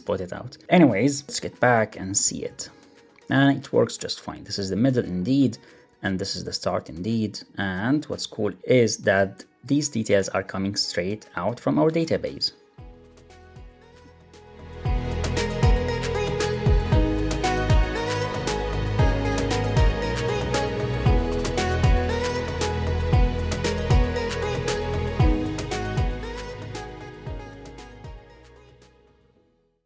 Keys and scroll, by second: 2.4 super+r.